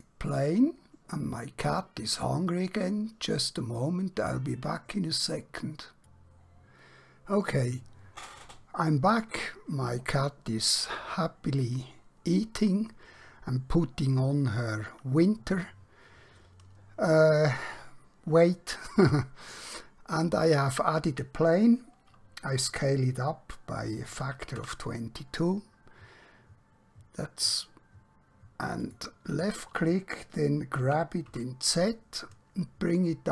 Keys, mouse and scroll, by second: 22.8 s, 26.9 typing, 28.9 click, 30.9-31.3 typing.